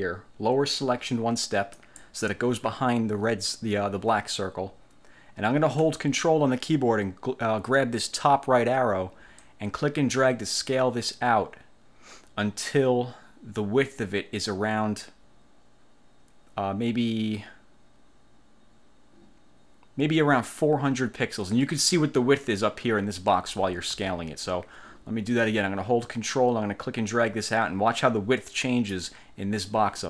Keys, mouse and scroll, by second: 1.9 click, 9.6-21.8 ctrl+drag, 24.0 ctrl+z, 26.2-29.2 ctrl+drag.